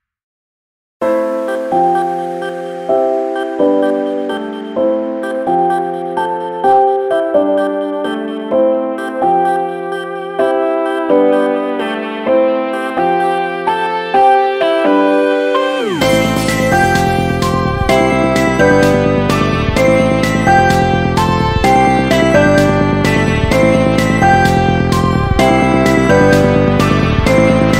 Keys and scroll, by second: 0.5 ctrl+z, 1.1 ctrl+z, 2.1 ctrl+z, 4.2 ctrl+-, 10.5 ctrl+z, 12.7 ctrl+-, 16.7 ctrl++, 18.3 ctrl+z, 18.8 ctrl+z, 19.1 ctrl+z, 19.7 ctrl+z, 20.6 ctrl++, 21.1 ctrl+z, 23.9 ctrl+z.